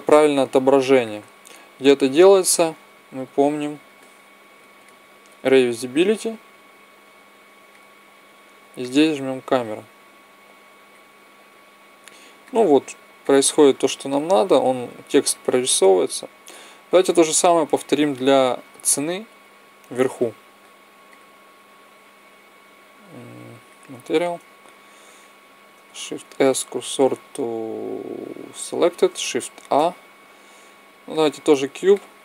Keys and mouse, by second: 0.2-2.0 drag, 2.7-5.5 drag, 6.0-10.5 drag, 10.9 click, 14.9-17.2 drag, 21.0-23.5 drag, 25.3-27.3 right drag, 26.1 shift+s, 29.5 shift+a, 31.8 middle click.